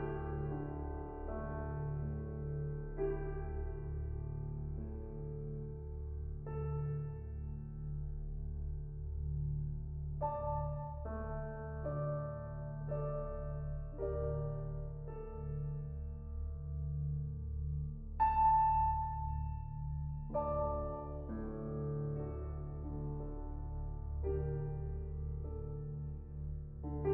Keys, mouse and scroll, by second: 4.0-5.2 drag, 6.2-7.5 drag, 7.6-10.0 shift+drag, 11.0 middle drag, 11.2 scroll down 1, 11.3 middle click, 12.0 scroll up 3, 12.1 middle click, 12.7-13.9 drag, 14.4-17.1 middle drag, 17.3 middle click, 17.6-18.0 scroll up 1, 18.0-19.3 drag, 21.0 click, 22.0 middle click, 22.5-22.9 scroll up 1, 22.9-24.2 shift+drag, 24.8 scroll down 4, 25.0 middle click, 25.7 click, 26.1 shift+a.